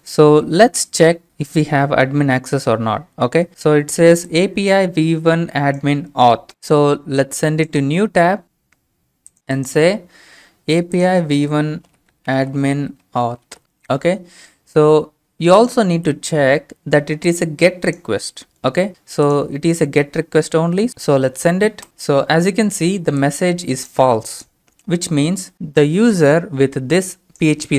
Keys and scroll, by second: 11.6-14.1 typing, 21.9 ctrl+space.